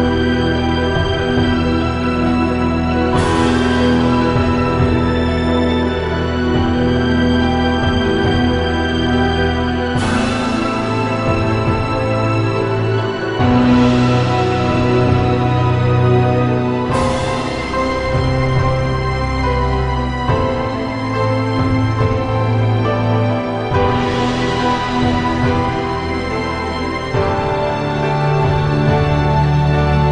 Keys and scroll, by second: 4.3 i, 7.2 i, 7.9 i, 8.7 -, 29.3 -, 29.9 +.